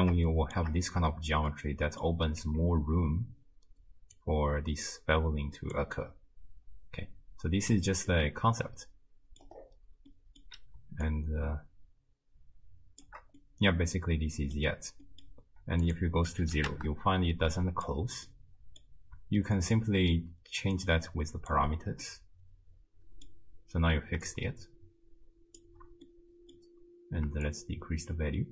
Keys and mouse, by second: 0.3-0.6 shift+middle drag, 1.7 middle click, 2.4 z, 4.3-5.7 drag, 8.1-9.5 middle drag, 10.1 middle click, 11.1-13.0 shift+drag, 13.5-14.5 middle drag, 15.0 middle click, 15.8 click, 17.6 click, 18.3-18.9 middle drag, 19.8-21.5 shift+drag, 22.2-23.3 middle drag, 24.3-25.6 shift+drag, 26.1 middle click, 27.5-28.5 shift+drag.